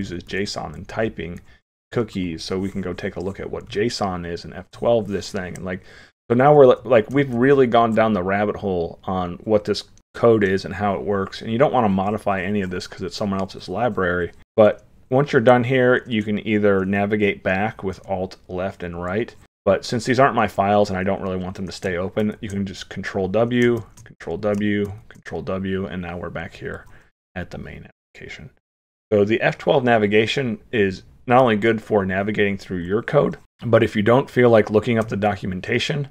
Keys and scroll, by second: 18.0 alt+Left, 19.0 alt+Right, 22.2 ctrl+w, 23.8 ctrl+w, 24.9 ctrl+w.